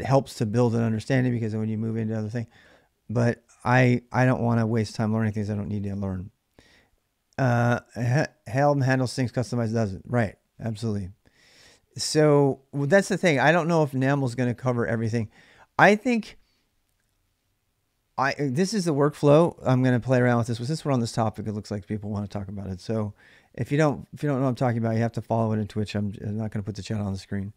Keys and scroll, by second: 3.8-5.4 typing, 5.6 Return.